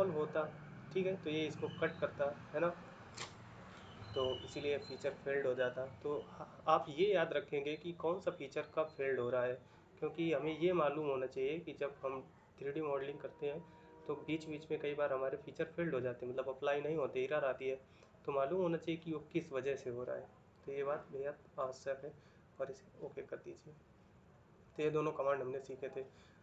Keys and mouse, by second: 23.0 middle click.